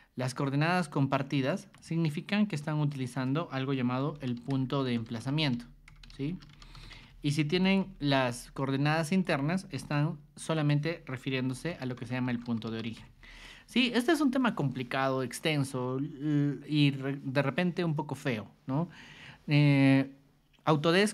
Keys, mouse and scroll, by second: 0.2 b, 1.5 ctrl+shift+click, 2.9 click, 3.5-7.8 typing, 7.6 click, 8.8 ctrl+shift+click, 9.9 t, 10.5 click, 11.0-13.5 typing, 13.7 click.